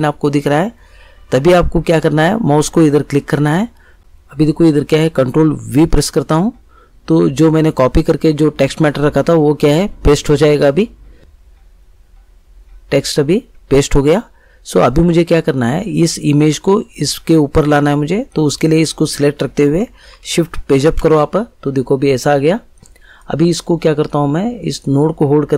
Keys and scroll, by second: 5.7 ctrl+v, 20.7 shift+Page_Up.